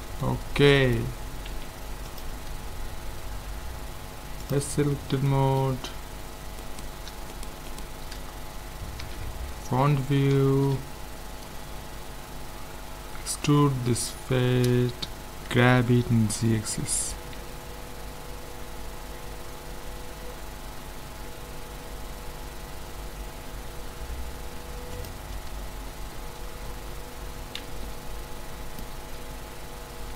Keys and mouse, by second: 1.5 ctrl+s, 4.5-6.2 drag, 6.2 middle click, 6.6-8.0 drag, 6.6-9.2 right drag, 9.0 KP_1, 10.4 z, 10.9 right click, 13.5 e, 15.5 g, 25.7-28.8 middle drag, 27.6 z.